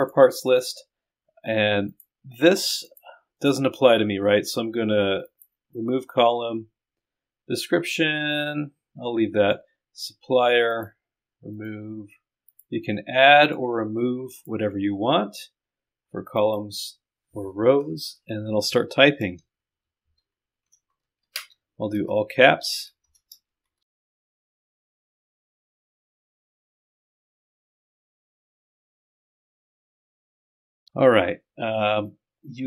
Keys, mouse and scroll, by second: 0.0 click, 1.9 click, 2.9 click, 3.4 right click, 9.4 right click, 10.7 middle click, 11.6 right click, 12.5 middle click, 13.4 click, 14.4 middle click, 19.7 shift+s, 20.2 e, 20.8 Caps_Lock, 20.9 BackSpace, 21.0 e, 22.5 Return, 22.7-24.2 typing, 26.6 o, 27.7 click, 28.0 click.